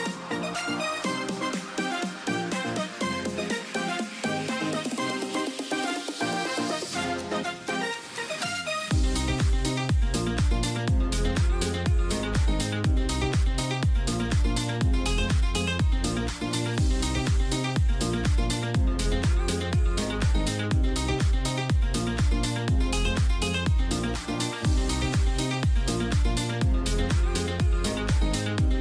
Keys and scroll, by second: 3.1 ].